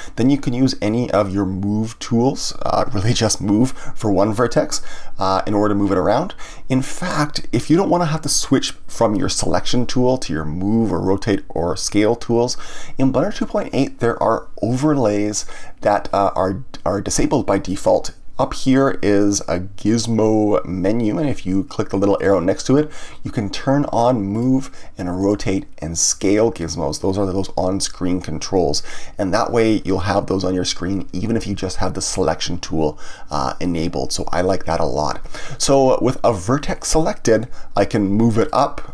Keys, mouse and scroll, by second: 22.2-25.1 drag, 37.9-38.9 drag.